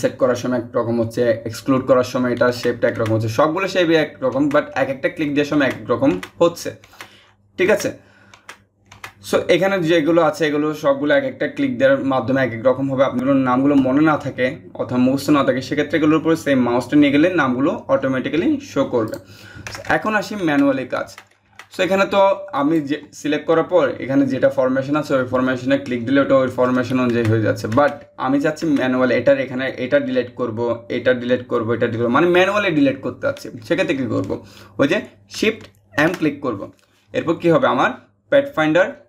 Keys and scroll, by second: 35.6 shift+m.